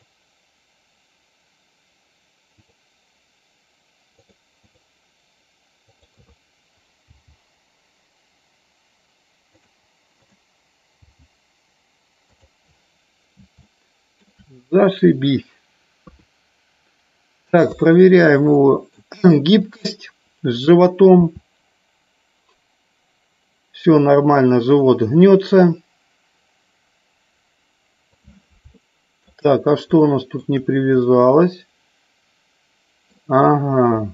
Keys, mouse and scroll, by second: 2.7 click, 4.2 click, 4.7 click, 6.0 click, 7.2 g, 9.8 click, 11.2 g, 12.4 click, 13.8 shift+middle click, 16.1 KP_2, 18.6 shift+middle click, 21.3 r, 28.1 click, 28.9 shift+middle click, 30.1 shift+middle click, 31.1-33.2 middle drag.